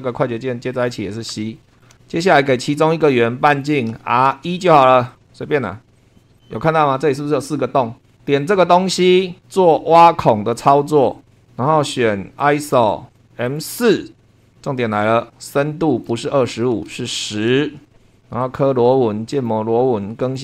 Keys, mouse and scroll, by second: 0.7 click, 1.3 c, 1.7 scroll down 2, 1.8 shift+middle click, 2.0-2.4 shift+scroll up 3, 3.5 click, 3.9 r, 4.3 1, 5.1 click, 5.9 click, 6.2 scroll up 1, 6.4 click, 8.2 click, 11.1 click, 12.4 click, 12.8 click, 13.4 click, 14.4 click, 15.6 click, 17.1-18.0 typing, 18.1 click, 18.4 click, 19.3 click, 20.2 click.